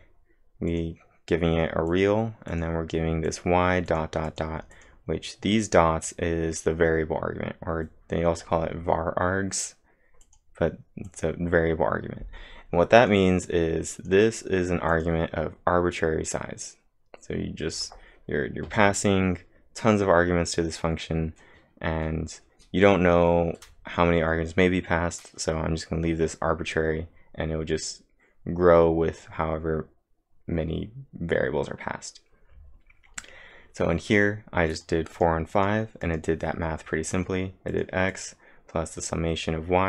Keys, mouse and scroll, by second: 0.7 click, 1.9 click, 2.5 click, 6.1-6.9 typing, 10.0-10.7 typing, 10.2 click, 34.4-35.2 typing, 34.7 click, 35.1 click.